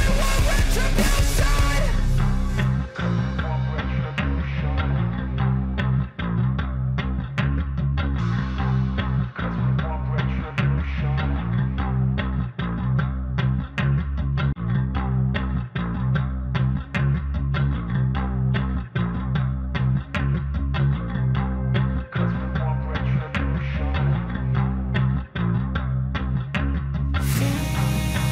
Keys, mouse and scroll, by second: 21.3 click, 23.0 right click, 24.4-28.3 drag.